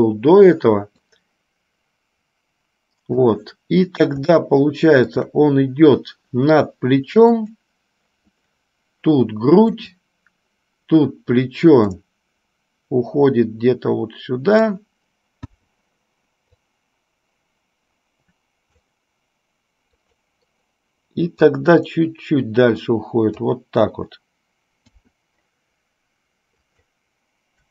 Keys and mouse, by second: 1.2-3.4 drag, 4.5-5.5 shift+middle drag, 7.7 click, 10.0 click, 12.0-15.0 drag, 15.8 i, 16.9-19.2 drag, 20.3 click, 21.5-23.8 drag, 25.0 i, 26.8 click.